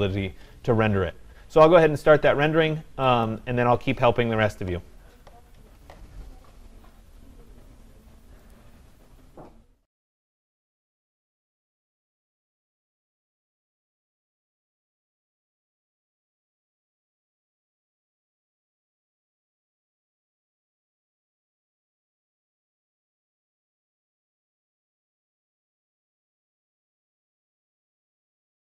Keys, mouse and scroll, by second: 3.6-8.7 drag.